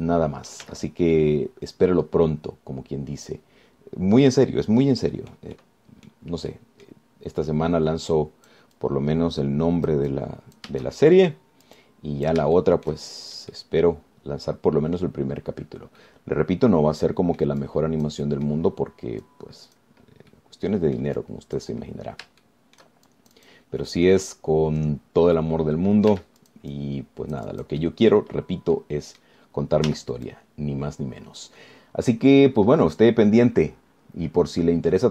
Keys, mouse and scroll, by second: 0.0-1.9 drag, 1.9 z, 2.4-6.7 drag, 7.7 click, 8.5 middle click, 9.3 click, 10.1-12.0 drag, 12.3-13.7 shift+drag, 13.8 shift+click, 14.7-16.4 drag, 16.5 scroll down 1, 17.2-18.8 drag, 19.5 click, 20.5 click, 21.5 click, 23.3 scroll up 1, 23.7 shift+click, 24.3 shift+click, 27.3 f, 27.6-29.1 drag, 29.1 right click, 29.1 scroll down 1, 29.6 scroll up 1, 30.0 click, 30.0 right click, 31.1 z, 31.5-35.1 drag.